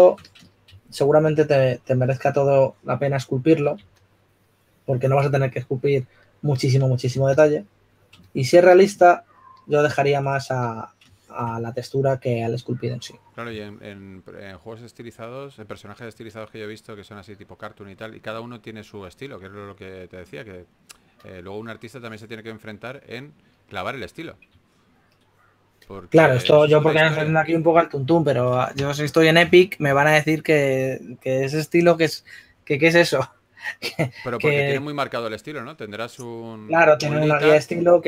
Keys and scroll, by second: 0.6 4, 5.2 4, 8.5 typing, 15.9-16.4 typing, 17.9 typing, 25.1 typing.